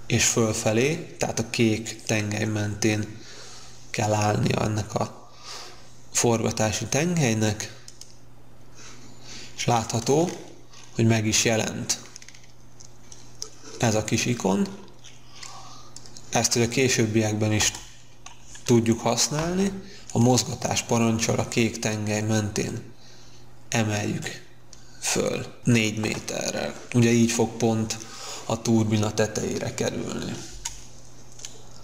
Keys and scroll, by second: 17.5 space, 19.3 m, 20.3 m, 26.0 Return, 30.4 space.